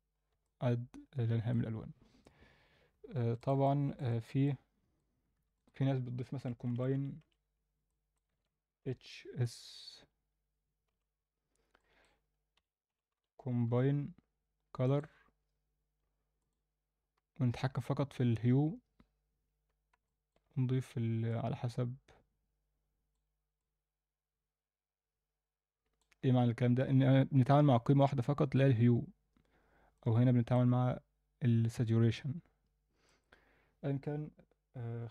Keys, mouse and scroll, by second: 0.1 scroll down 1, 0.4-1.5 alt+middle drag, 3.4 click, 3.6 alt+shift+middle click, 4.5-5.0 drag, 5.3 shift+a, 20.0 alt+middle click, 21.3-23.2 drag, 23.6-26.0 drag, 29.9-30.7 drag, 33.2 click.